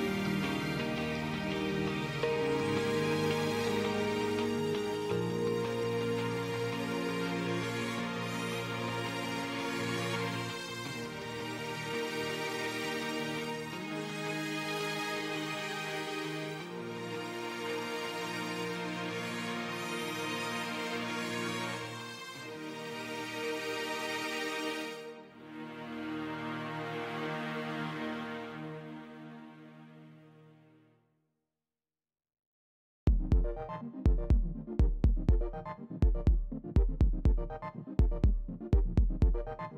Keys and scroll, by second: 18.4 ctrl+space, 18.8 ctrl+space, 25.4 space.